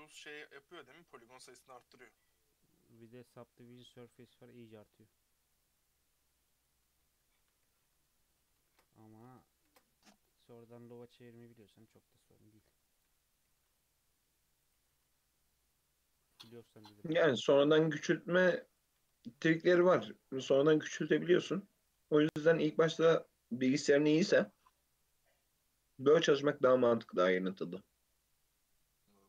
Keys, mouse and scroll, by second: 0.7 Tab, 1.0-1.4 scroll down 2, 1.0 alt+z, 1.4-4.5 middle drag, 4.5-5.5 scroll down 1, 5.5-6.3 drag, 6.3-7.0 middle drag, 7.0 Tab, 7.4 a, 8.1-8.6 middle drag, 8.6 ctrl+a, 9.3 Tab, 9.7 ctrl+a, 10.4 Tab, 11.5 e, 13.5 g, 14.9 Tab, 15.3-15.7 middle drag, 15.7 Tab, 16.1-17.6 middle drag, 17.6 x, 19.1 Tab, 19.4-19.8 middle drag, 19.8 Tab, 20.1 2, 20.7 alt+click, 21.2 g, 22.0 Tab, 22.2-22.6 middle drag, 22.6 scroll up 1, 22.9-23.6 right drag, 23.6-23.9 scroll down 1, 23.9-25.0 middle drag, 25.0 Tab, 26.0 Tab, 26.8 Tab, 27.4 Tab, 28.7 click.